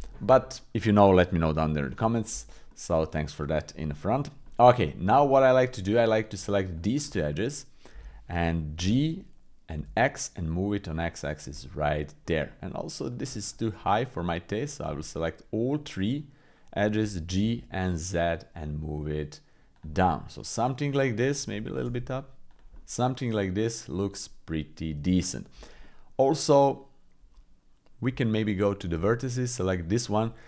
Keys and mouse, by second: 0.4 middle click, 1.9 middle click, 2.7 middle click, 3.9 middle click, 4.4 middle click, 4.8 middle click, 7.0 shift+click, 7.5 click, 8.8 g, 11.5 click, 12.5 click, 13.1 click, 13.4 shift+click, 13.8 shift+click, 14.9 click, 17.0 g, 20.0-21.1 drag, 21.5 g, 22.7 middle click, 23.5 middle click, 24.4 middle click, 25.1 shift+middle click, 25.8 middle click, 28.1 Tab.